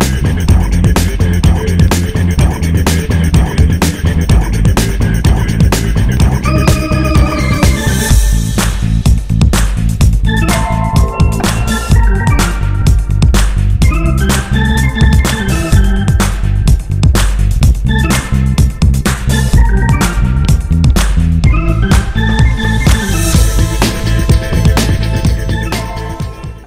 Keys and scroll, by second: 7.6 Escape, 7.9 Escape.